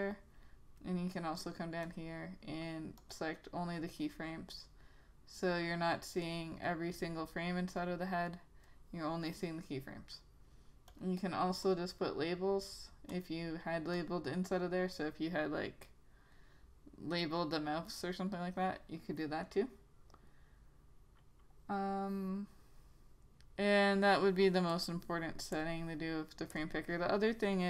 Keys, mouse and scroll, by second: 6.4 click, 24.8 click.